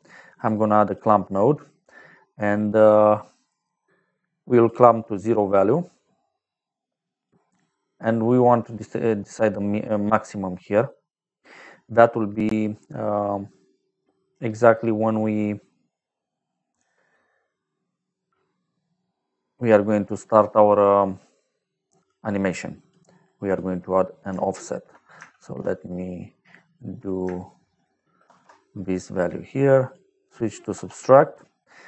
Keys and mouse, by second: 0.3 click, 0.8 click, 1.4 middle click, 2.4 click, 3.2 middle click, 4.2 click, 7.0 click, 16.3 middle click, 22.4 click, 23.2 click, 23.8 middle click, 25.0 click, 25.3 shift+s, 26.5 click, 28.2 shift+d, 29.1 click, 29.8 click, 30.6 s.